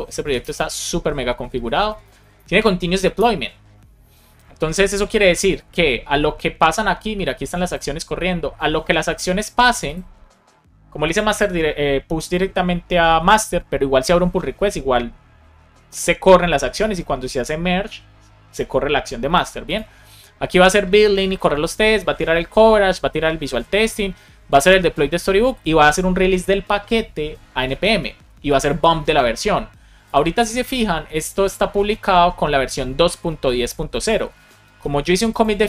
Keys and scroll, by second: 1.6 Down, 3.1 Return.